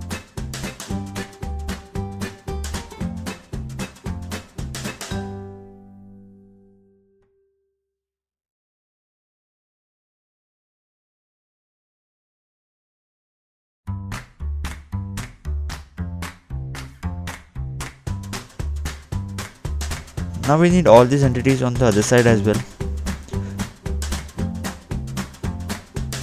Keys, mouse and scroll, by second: 0.7 scroll up 2, 0.9 scroll down 2, 1.3 click, 1.8 scroll up 2, 2.1 scroll down 2, 2.6 click, 2.8 scroll up 2, 3.0 scroll down 2, 3.2 scroll up 2, 3.4 click, 3.4 scroll down 2, 3.7 double click, 3.9 scroll up 2, 4.0 scroll down 2, 4.1 scroll up 2, 4.1 scroll down 2, 4.2 scroll up 2, 4.3-5.7 scroll down 3, 7.4 click, 10.1 scroll up 2, 10.7 scroll up 1, 12.3 middle click, 12.7-13.1 scroll down 2, 18.9 click, 22.9 click, 25.7 double click.